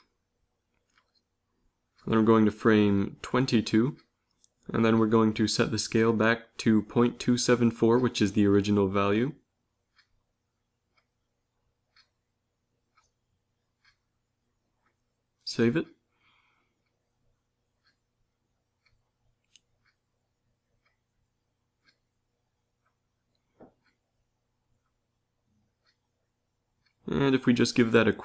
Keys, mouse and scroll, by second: 1.1 i, 12.6 ctrl+c, 13.3 ctrl+v, 14.2 ctrl+v, 15.3 ctrl+s.